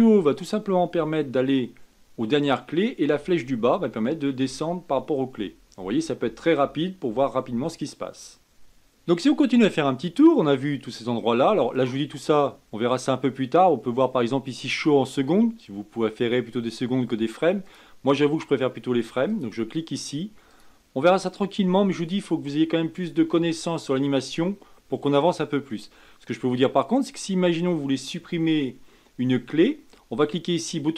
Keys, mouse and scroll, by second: 0.9 Up, 3.1 Down, 3.7 Down, 4.4 Up, 4.8 Up, 5.3 Down, 5.7 Down, 6.2 Up, 6.5 Up, 7.0 Down, 7.4 Down, 12.0-15.0 drag, 17.9-23.9 drag, 30.8-30.9 right drag.